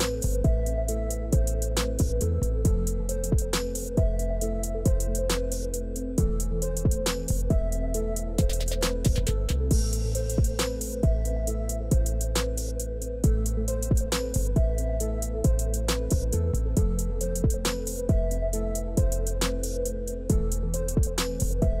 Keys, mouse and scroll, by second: 0.9 e, 3.3 q, 4.4 e, 6.0 q, 7.7 click, 8.6 click, 8.9 click, 9.7 click, 11.0-19.2 drag, 20.9 click.